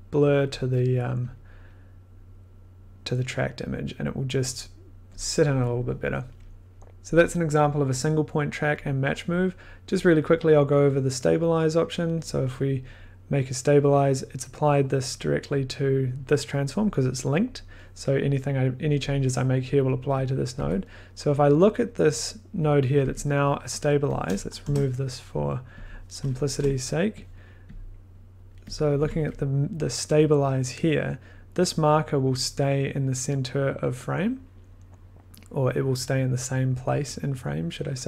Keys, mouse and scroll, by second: 1.2 click, 1.2 click, 1.2 click, 6.9 click, 9.4 click, 9.8 click, 9.9 click, 11.2 click, 12.1 click, 12.2 click, 15.1 click, 15.9 click, 20.2 click, 20.5 1, 21.8 click, 22.8 click, 23.0 1, 24.5 click, 24.6 BackSpace, 25.8 scroll, 26.4 click, 26.5 BackSpace, 27.3 click, 28.7 click, 28.9 click, 29.0 1, 30.7 click.